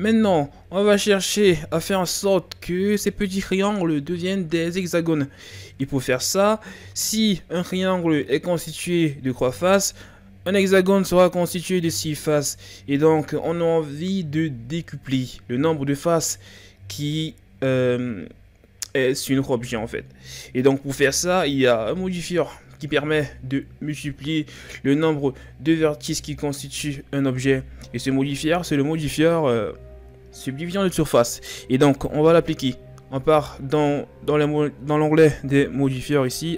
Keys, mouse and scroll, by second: 0.0-0.8 scroll up 3, 0.8-3.0 ctrl+scroll down 2, 3.0-4.6 scroll up 1, 7.1-9.9 scroll up 1, 17.8-20.6 scroll up 2, 32.0 click.